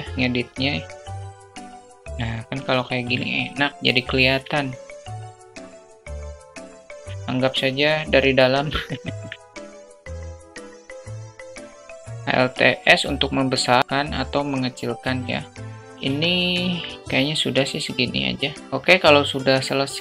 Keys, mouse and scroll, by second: 3.1-3.4 middle drag, 4.0-4.6 middle drag, 4.9 alt+shift+middle drag, 5.2-5.7 alt+drag, 5.6 alt+middle click, 5.6 alt+right click, 5.9 alt+middle drag, 6.5 alt+middle click, 7.0 alt+shift+middle click, 7.9 alt+middle click, 8.2 click, 9.4 middle click, 9.7 Tab, 9.9 click, 10.2 middle click, 10.4 middle click, 10.5 click, 10.6 ctrl+z, 10.7 click, 10.9 alt+middle click, 11.0 alt+middle click, 11.2 KP_0, 11.5 a, 11.8 alt+middle click, 13.6 alt+s, 17.1 Tab, 18.1 click.